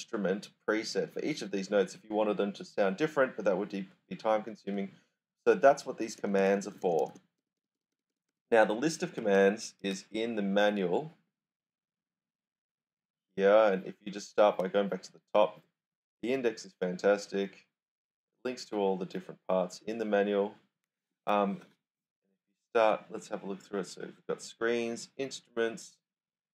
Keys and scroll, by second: 4.2-7.8 typing, 9.2 super+Tab, 9.8 super+Tab.